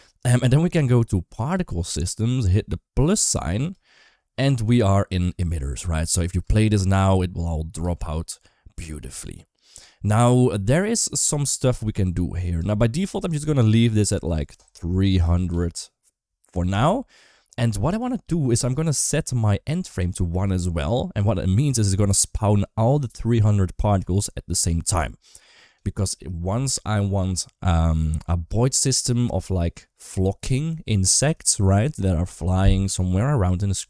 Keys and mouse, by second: 1.3 click, 5.6 middle drag, 6.2 space, 7.6 space, 10.5 click, 10.9 click, 12.5 shift+middle drag, 14.2-16.5 drag, 15.3 0, 20.0 click, 23.7 space, 24.7 space.